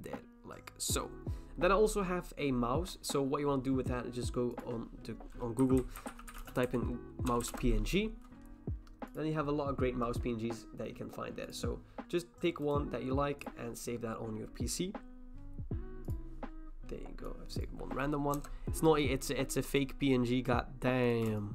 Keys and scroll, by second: 5.4-7.1 typing, 7.5 Return, 18.3 Return.